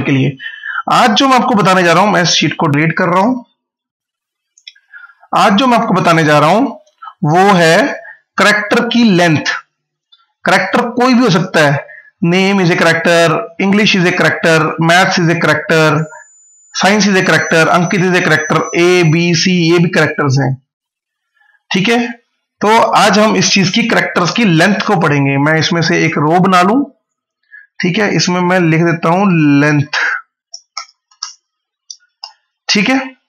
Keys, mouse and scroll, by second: 1.6 right click, 2.4 click, 3.1 Return, 4.3 click, 5.7 click, 12.1 click, 14.7 click, 24.8 right click, 25.7 click, 27.9-31.6 typing.